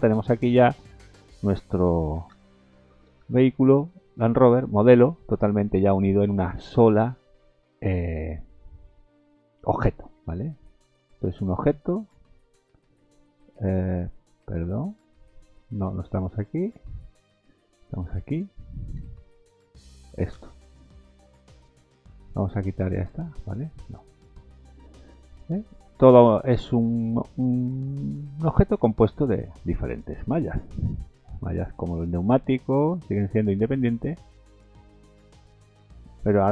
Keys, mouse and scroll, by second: 1.1 middle click, 2.1 a, 2.3 a, 2.6 middle click, 3.2 shift+z, 3.5 middle click, 3.9 scroll up 3, 4.4 shift+middle click, 7.6 middle click, 8.6 shift+middle click, 9.5 middle click, 10.0 shift+middle click, 10.4 Tab, 11.0 click, 11.7 Tab, 12.9 Tab, 13.2 middle click, 13.8 Tab, 14.4 Tab, 15.2 Tab, 16.4 click, 16.8 Tab, 17.1 click, 18.3 click, 19.6 Tab, 20.2 a, 20.4 a, 20.8 middle click, 21.3-22.0 scroll up 6, 23.1 click, 23.9 scroll up 3, 24.2-24.7 scroll down 9, 25.4 middle click, 25.9 middle click, 27.9 shift+middle click, 28.1 shift+middle click, 28.3 scroll up 2, 28.9 shift+middle click, 29.5 middle click, 31.1 l, 32.3 g, 35.1 scroll down 1, 35.6 middle click.